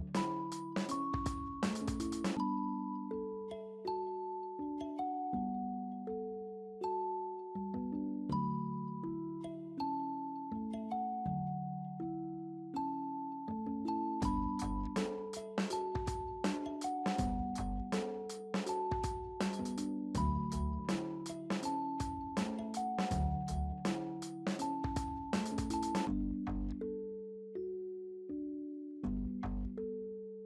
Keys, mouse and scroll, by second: 24.6 right click, 29.3 right click, 30.0 right click.